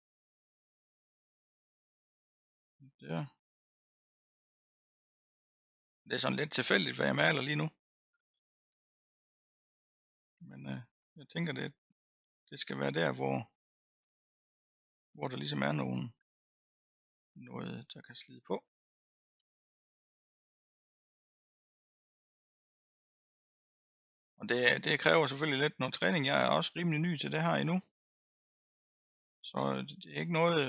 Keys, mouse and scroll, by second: 0.2 middle click, 1.1-2.1 scroll up 1, 2.1-5.9 drag, 5.9-6.7 scroll down 2, 6.7-7.8 middle drag, 7.8-8.8 scroll up 2, 8.8-9.7 scroll down 1, 9.7-10.1 scroll down 1, 10.1-11.1 drag, 11.1-11.9 scroll up 2, 11.9-13.2 scroll down 1, 13.2-16.2 drag, 16.2-17.2 scroll down 1, 17.2-20.2 drag, 20.2-20.7 scroll down 1, 20.7-21.3 scroll down 1, 21.3-21.8 scroll down 1, 21.8 middle click, 22.4-23.1 scroll up 2, 23.1-24.9 middle drag, 24.9-27.7 drag, 27.7-30.6 middle drag.